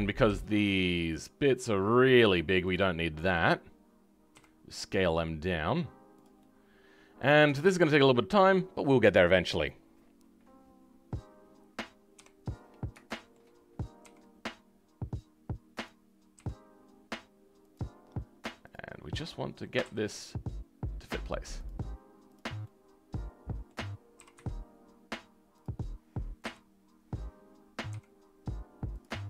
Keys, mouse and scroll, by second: 6.3-8.4 middle drag, 8.4 click, 12.1 KP_7, 12.5 scroll up 2, 13.0 shift+middle click, 13.9 r, 18.6 click, 22.5-26.3 middle drag, 26.3 KP_3, 26.9 scroll up 4, 27.8 r.